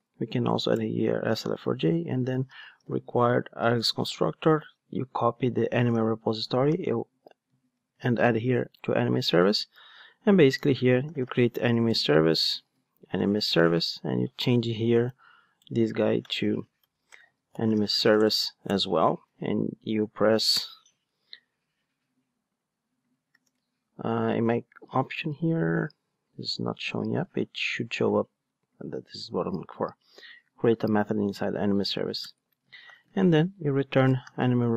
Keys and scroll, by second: 0.8 Return, 3.8 ctrl+Tab, 5.5 super+c, 5.9 ctrl+Tab, 6.7 super+v, 7.8 alt+super+l, 9.4 ctrl+Tab, 11.8 Return, 12.4 alt+shift+Right, 13.0 alt+Right, 13.0 Return, 16.8 alt+shift+Left, 18.7 Return, 20.5 alt+Return.